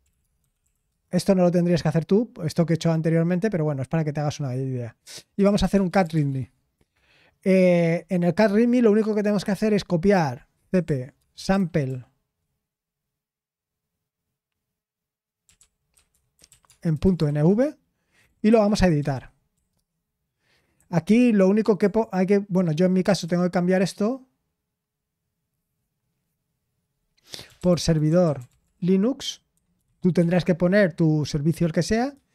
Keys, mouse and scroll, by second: 0.0-3.2 typing, 5.3-9.0 typing, 10.7-12.3 typing, 16.2-19.7 typing, 20.7-23.2 typing, 24.8-26.2 typing, 27.2-30.3 typing, 32.1 j.